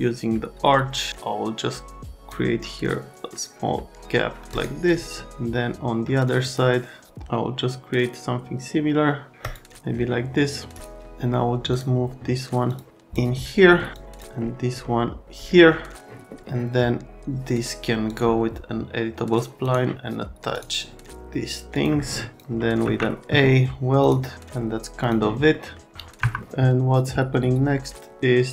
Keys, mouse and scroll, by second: 0.9 click, 4.5 click, 6.4 click, 9.4 click, 11.7 click, 12.7 click, 12.9 click, 13.9 click, 18.0 click, 19.6 click, 20.5 click, 21.7 click, 22.3 click, 22.8 ctrl+a, 24.0 click, 25.0 click, 25.5 scroll up 1, 26.2 F3.